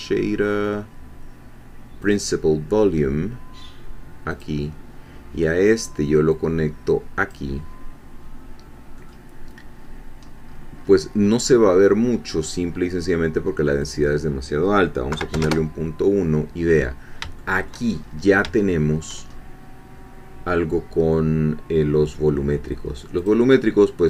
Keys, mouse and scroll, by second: 2.0 click, 4.3 click, 6.4-7.5 drag, 9.0 middle click, 9.8-10.1 scroll down 1, 10.4-10.8 scroll up 2, 10.8 scroll down 2, 11.3 scroll down 2, 11.6 scroll up 2, 12.7 scroll up 2, 13.8 click, 15.1 ., 15.3 1, 15.4 Return, 16.8 scroll down 2, 17.4 shift+middle click, 18.0-18.4 shift+scroll up 3, 18.6 shift+middle click, 19.2-19.6 shift+scroll up 2, 19.9 middle click, 23.2 click.